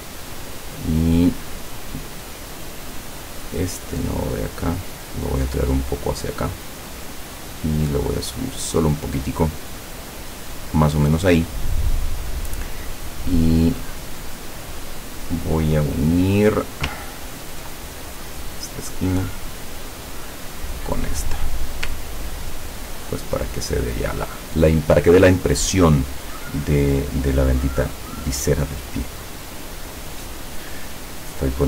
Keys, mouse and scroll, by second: 3.3 click, 4.2-9.1 drag, 13.4 click, 16.6 click, 17.3 ctrl+scroll up 2, 18.6 click, 20.5 click, 22.2 ctrl+scroll down 2.